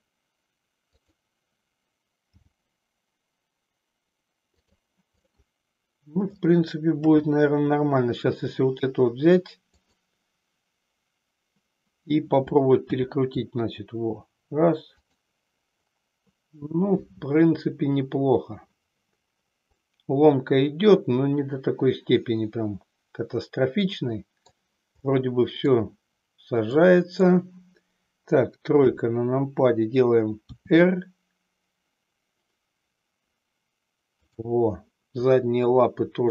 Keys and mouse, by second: 1.1 click, 2.3 g, 5.3-6.5 middle drag, 7.1 KP_3, 9.7-10.5 drag, 12.8 r, 15.2 click, 19.7-24.5 middle drag, 25.2 middle click, 26.8 click, 28.7 KP_3, 30.6 r.